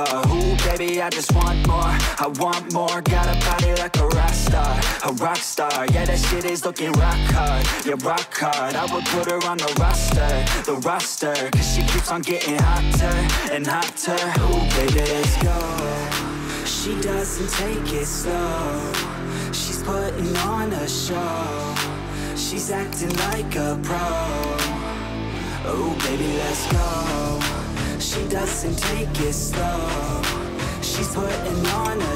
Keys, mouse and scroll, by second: 0.0 click, 1.0 click, 1.4 click, 2.7 click, 3.4 click, 4.2 click, 5.0 click, 5.8 click, 6.4 click, 6.9 scroll, 8.4 click, 9.2 click, 10.0 click, 10.1-11.4 typing, 11.9 click, 12.4 click, 13.8 click, 14.9 click, 15.7 click, 18.3-19.5 typing, 21.0-21.7 typing, 23.0 click, 23.2 click, 24.5 click, 25.6-28.9 typing, 28.4 click, 31.8 alt+click.